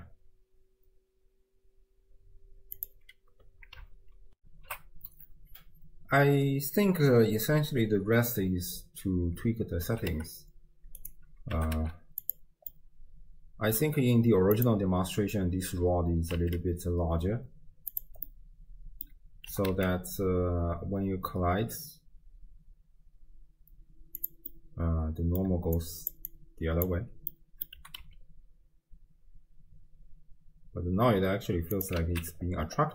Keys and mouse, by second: 9.9 g, 12.9-13.9 drag, 12.9 g, 14.6 click, 16.4 s, 18.4-19.1 drag, 19.5 g, 24.6-25.4 drag, 25.5-27.8 typing, 25.8 click, 26.3 click, 27.5 click, 32.0 alt+z.